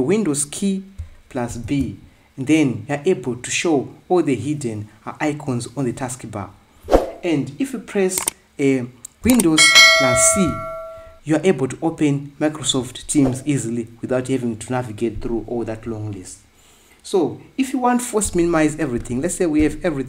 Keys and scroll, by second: 2.3 super+b, 7.6 Escape, 11.0 super+c.